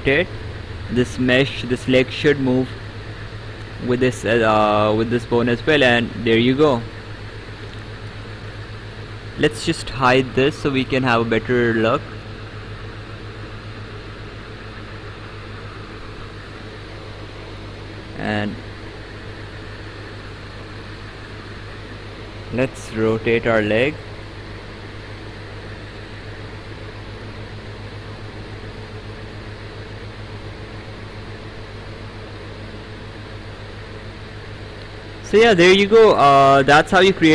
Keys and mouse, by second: 3.8 click, 8.3 ctrl+z, 9.5 click, 10.9 click, 12.4 click, 17.6 click, 18.9 click, 20.5 right click, 22.9 click, 27.2 click, 31.1 click, 34.7 ctrl+z, 36.5 right click.